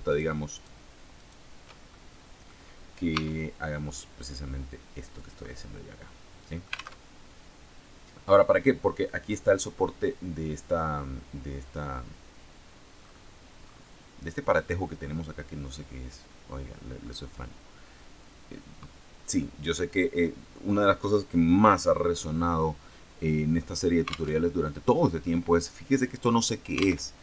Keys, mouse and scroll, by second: 0.0 shift+right click, 0.4 shift+right click, 1.1 shift+right click, 1.8 shift+right click, 2.0 middle click, 3.0 e, 5.1-6.9 drag, 6.9 alt+Tab, 12.9-13.8 scroll up 2, 24.3 alt+Tab, 27.0 alt+Tab.